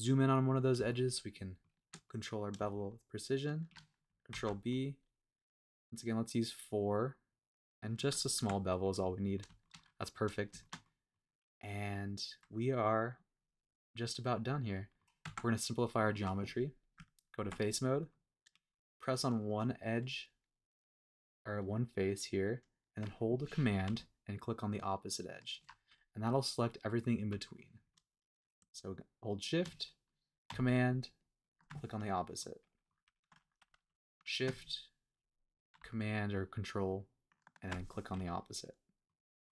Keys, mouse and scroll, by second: 0.3 scroll up 2, 0.9 shift+middle click, 2.0 middle click, 2.7 shift+middle click, 4.3 super+b, 8.0 click, 8.3 Tab, 8.7 scroll down 1, 9.0 middle click, 9.6 shift+middle drag, 9.9 middle drag, 10.1-10.5 scroll down 2, 10.6 shift+middle click, 10.8-11.2 middle drag, 11.3-11.9 scroll up 1, 11.9-15.0 middle drag, 15.1 scroll down 1, 15.2 Tab, 15.9 middle click, 16.3-16.8 scroll up 1, 16.9 Tab, 18.9 click, 24.9 super+click, 27.9 middle click, 29.4 shift+click, 31.4 super+click, 32.0-32.4 scroll down 2, 32.4 middle click, 33.1 scroll up 1, 34.2 shift+click, 37.4 super+click, 38.1-39.1 middle drag, 39.1-39.4 scroll down 1, 39.4-39.5 middle drag.